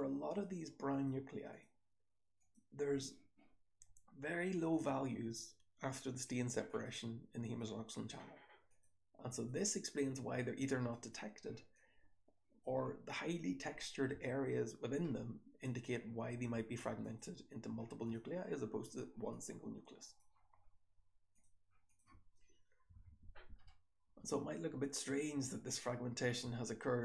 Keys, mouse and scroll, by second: 11.6-12.5 drag, 15.0-15.7 drag, 17.9 click, 18.7 click, 19.3-20.1 drag, 21.8 click, 22.8 h, 23.5-26.0 scroll up 1, 23.6 h, 26.0-27.0 scroll up 1.